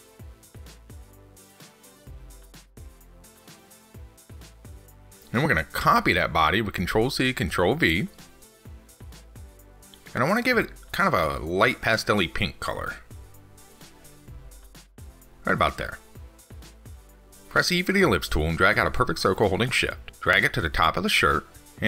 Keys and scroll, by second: 6.0 ctrl+c, 6.4 ctrl+v.